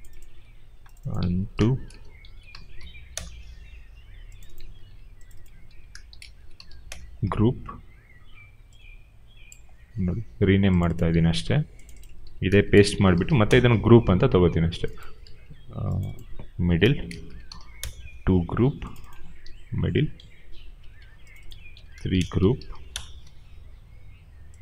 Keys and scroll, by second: 0.3 ctrl+c, 1.5-2.9 typing, 3.0 Return, 4.7 ctrl+c, 5.6 ctrl+v, 5.7-7.0 typing, 11.2 ctrl+c, 12.3-13.6 typing, 15.2 ctrl+c, 16.6 ctrl+v, 16.6-17.9 typing, 19.4 ctrl+c, 21.8-23.2 typing.